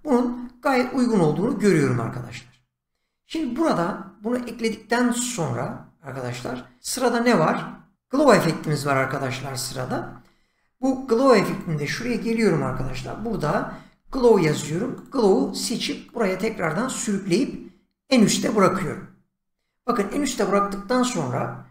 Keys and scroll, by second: 12.4-13.6 typing.